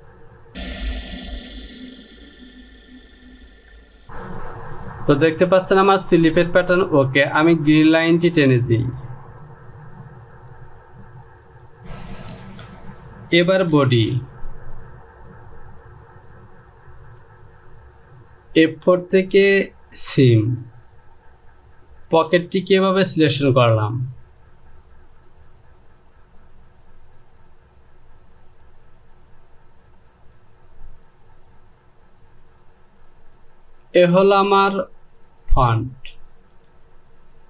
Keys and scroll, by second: 3.5 Home, 14.2 Return.